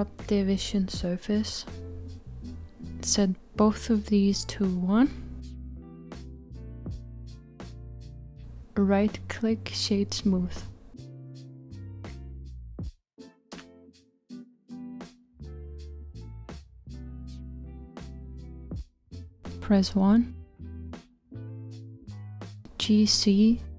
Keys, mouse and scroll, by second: 0.0-1.5 drag, 4.3-7.0 drag, 7.0 right click, 10.5-11.7 scroll down 4, 11.7-18.1 middle drag, 18.4 KP_1, 21.4 g.